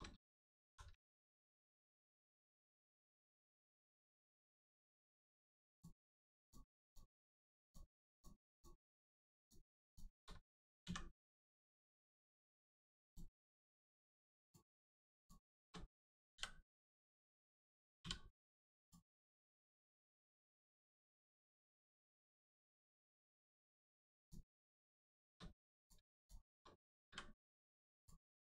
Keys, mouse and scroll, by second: 0.6 shift+r, 1.0 middle click, 4.0 shift+middle click, 4.3 scroll up 1, 4.8 middle click, 5.1-5.7 scroll up 1, 5.7 click, 6.4 shift+click, 8.5 shift+click, 9.4 shift+click, 9.8 shift+click, 10.8 shift+x, 13.0 click, 15.1 shift+click, 16.9 click, 18.8 click, 19.2 middle click, 20.0 shift+middle click, 20.8 scroll down 1, 21.2 middle click, 21.8-22.2 scroll down 1, 22.2 scroll up 1, 23.0 click, 23.2-23.7 scroll up 1, 24.2 shift+click, 24.9 shift+middle click, 25.8 click, 26.2 shift+click, 27.0 m, 28.0 click.